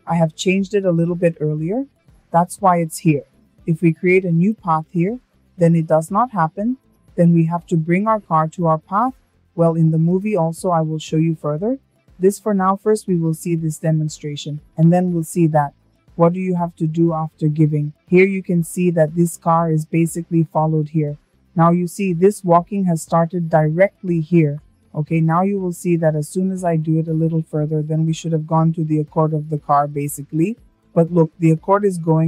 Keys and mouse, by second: 10.3 shift+middle click, 15.5 shift+middle drag, 20.1 click, 24.7-25.1 shift+middle drag, 26.0-32.2 drag.